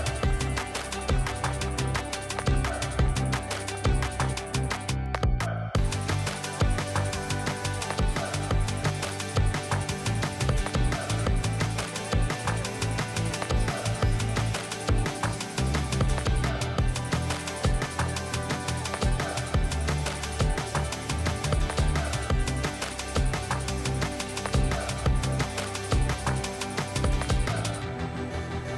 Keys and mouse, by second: 1.7-2.3 shift+drag, 2.5 shift+d, 4.1 r, 5.8 z, 5.9 z, 6.4 g, 11.6-13.1 drag, 12.9 KP_0, 14.4 click, 17.9 click, 18.6-19.8 drag, 19.6 KP_0, 21.4-23.0 typing, 24.9 ctrl+z, 25.2 ctrl+z, 27.7 shift+d.